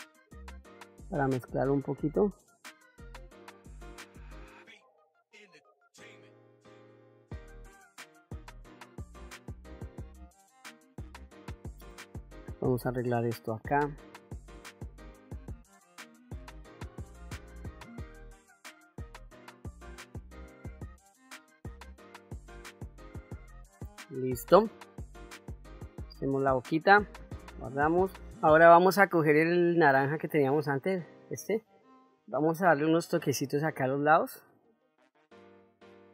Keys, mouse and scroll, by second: 1.7 click, 2.3 click, 4.3 middle click, 4.3 click, 4.6 middle click, 4.9 ctrl+middle click, 5.9 click, 6.6 click, 6.8-7.4 shift+f, 7.6-8.7 drag, 8.7 middle click, 8.9 ctrl+middle click, 9.2 ctrl+middle click, 9.3 middle click, 9.6 ctrl+middle click, 9.8 ctrl+middle click, 10.3 shift+middle click, 10.4 middle click, 10.9 shift+middle click, 11.1 middle click, 12.4 click, 13.7 KP_1, 14.7 ctrl+middle click, 15.3 shift+middle click, 16.1-17.4 drag, 17.9-19.0 drag, 19.8 click, 20.7-21.7 drag, 22.0 ctrl+middle click, 22.3 ctrl+middle click, 22.5 middle click, 22.8 ctrl+middle click, 23.0 ctrl+middle click, 23.1 middle click, 23.7 ctrl+middle click, 24.5 ctrl+middle click, 25.1 middle click, 26.8 ctrl+s, 30.7 click, 32.8 middle click, 34.9-35.9 ctrl+middle drag.